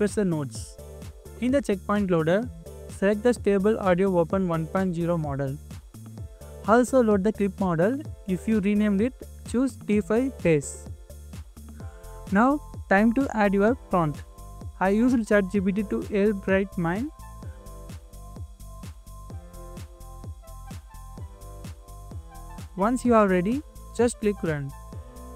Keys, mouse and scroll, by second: 1.2 middle click, 2.4 scroll up 1, 5.7 scroll down 1, 6.1 scroll up 1, 8.5 scroll down 1, 9.7 middle click, 14.3 typing, 16.1-16.9 typing, 19.7-21.0 typing, 21.1 middle click, 22.5 scroll down 1, 23.5 middle click.